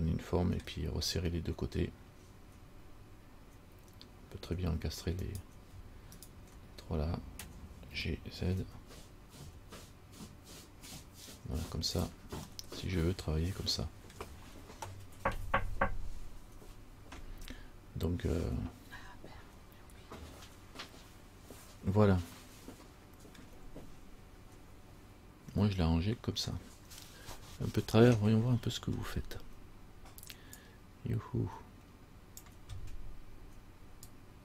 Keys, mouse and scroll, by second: 5.4 right click, 6.3 shift+right click, 8.1 g, 12.7 middle click, 22.7 middle click.